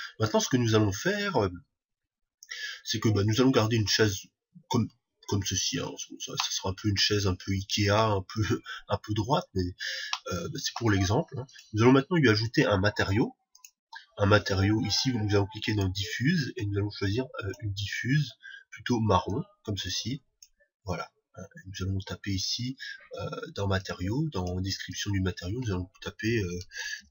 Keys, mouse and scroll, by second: 10.6-12.4 middle drag, 11.9-13.8 drag, 13.9-15.9 drag, 16.1-18.1 drag, 24.2-27.1 drag.